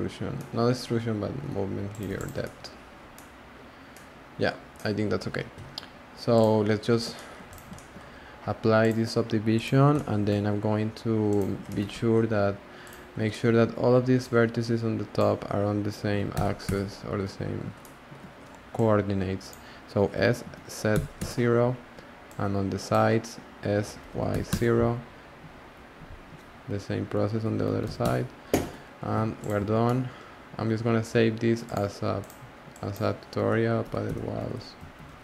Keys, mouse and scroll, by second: 0.6-1.3 scroll up 5, 1.3 g, 2.0 Tab, 2.1 click, 2.4 middle click, 2.7-3.1 scroll down 4, 3.1-6.3 middle drag, 6.3 click, 6.9 scroll up 2, 7.1-7.5 shift+middle drag, 7.5 click, 7.7 shift+middle drag, 8.0-8.8 scroll up 2, 8.8-9.9 drag, 9.9 middle drag, 10.2 Tab, 11.3 click, 11.7 shift+middle drag, 11.9 1, 12.1 scroll up 1, 12.1 scroll down 1, 12.2-12.8 scroll up 1, 12.8 click, 13.3 shift+middle drag, 13.6 scroll down 1, 13.6-14.2 scroll up 2, 14.2 click, 16.0 s, 19.5 click, 20.9 s, 22.9 click, 23.7 s, 26.2 click, 27.4 s, 28.6 Tab, 29.4 click, 29.6 s.